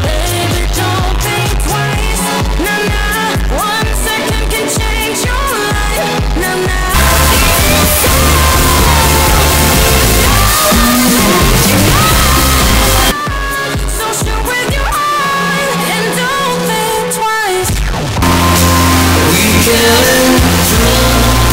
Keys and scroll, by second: 13.1 Page_Down.